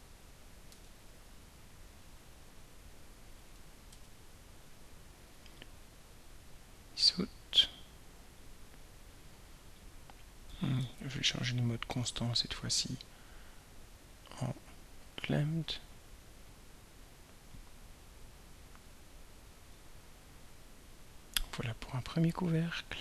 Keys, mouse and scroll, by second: 0.8 ctrl+a, 2.1-3.5 drag, 3.9 ctrl+y, 5.6 click, 10.8 ctrl+y, 12.3 click, 14.7 click, 16.5-19.9 drag.